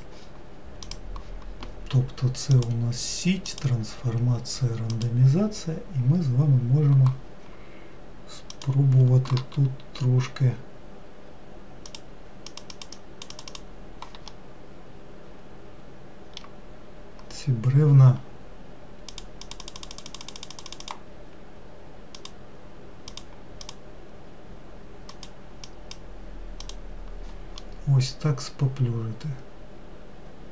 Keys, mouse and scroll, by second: 1.4 ctrl+z, 3.0-6.0 drag, 6.6-9.0 scroll up 2, 9.0-12.2 drag, 12.4-14.8 drag, 14.8-17.3 middle drag, 17.3-19.6 scroll down 1, 19.6-24.2 drag, 25.6-27.2 drag, 28.1-30.5 middle drag.